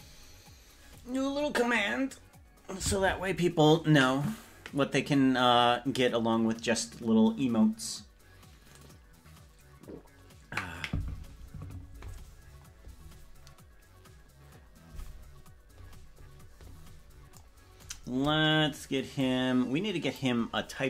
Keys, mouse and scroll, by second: 19.2-20.3 drag.